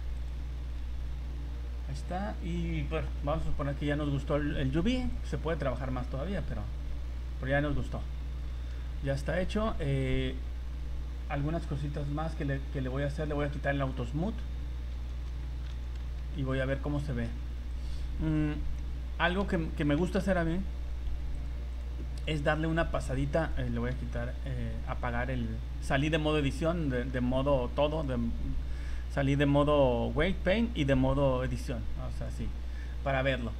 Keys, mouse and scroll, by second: 0.6 a, 1.7 scroll down 1, 1.9 scroll up 1, 5.1 click, 8.1-8.7 scroll up 8, 9.0 middle click, 11.9 click, 13.9 click, 14.9 z, 15.6 middle click, 15.7 z, 16.0 Tab, 16.7 middle click, 17.7 right click, 18.6 h, 19.4 Escape, 20.4 ctrl+z, 21.3 click, 22.5 right click, 23.4 right click, 24.0 h, 24.9 middle click, 25.9 right click, 26.9 middle click, 27.9 click, 32.8 middle click.